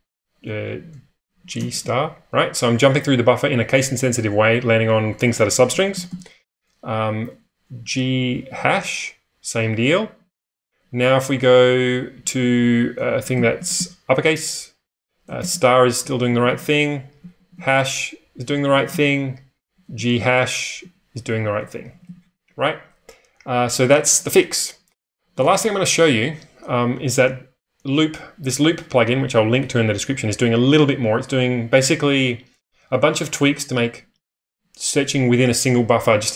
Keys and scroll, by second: 1.1-2.2 typing, 3.8-6.0 typing, 7.8-13.7 typing, 15.1-17.3 typing, 18.4-22.0 typing, 25.5 ctrl+space, 25.5 1.